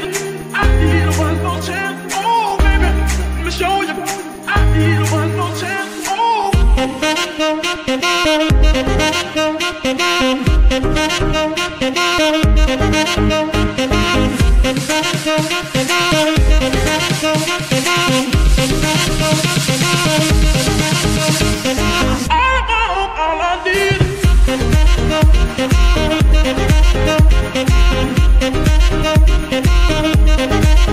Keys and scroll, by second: 8.7-9.3 typing, 11.4-12.1 typing, 16.1 F2, 17.3 BackSpace, 17.7 ., 18.0 l, 18.3 Return, 19.1 g, 25.7 Tab, 26.7 s, 27.8 z, 28.8 Tab, 29.4 shift+s.